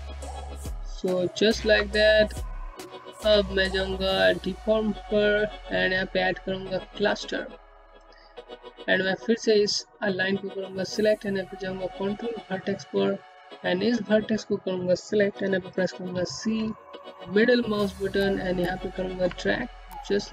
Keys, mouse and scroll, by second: 0.0-0.5 scroll down 1, 0.6 middle click, 3.6 middle click, 6.4 click, 10.4 right click, 12.9 click, 15.3-18.3 typing, 17.1 middle click, 19.0-19.6 scroll up 1, 19.6 scroll down 1, 19.8 alt+middle click.